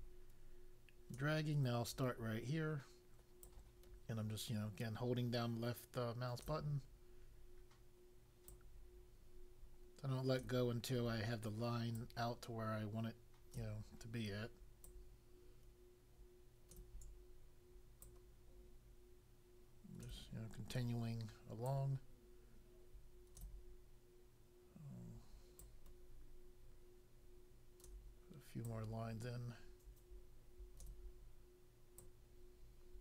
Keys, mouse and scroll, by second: 3.4 click, 8.4 click, 12.0 click, 14.8 click, 18.0 click, 21.6 click, 25.5 click, 28.6 click, 31.9 click.